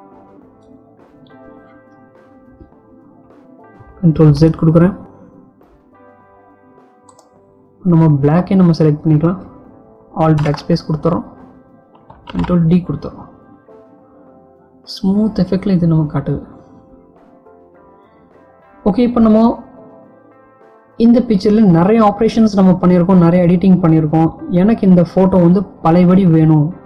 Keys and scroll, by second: 4.2 ctrl+z, 10.2 alt+BackSpace, 12.0 ctrl+d.